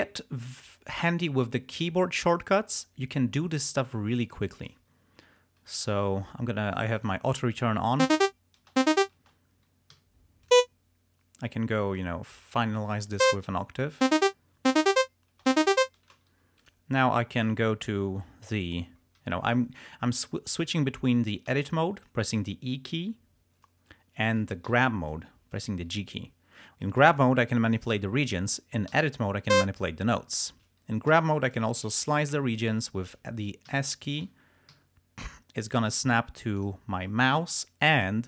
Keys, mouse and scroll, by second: 0.2 ctrl+scroll down 2, 5.7 click, 6.8 click, 7.1 click, 8.2 space, 10.0 d, 10.5 click, 12.0 click, 13.1 click, 14.1 space, 16.4 g, 16.7 click, 21.6 e, 24.8 g, 25.6 click, 26.9-28.1 drag, 29.0 e, 29.6 click, 31.2 g, 31.5 click, 32.1 s, 32.2 shift+click, 33.5 s, 36.6 click, 38.0 click.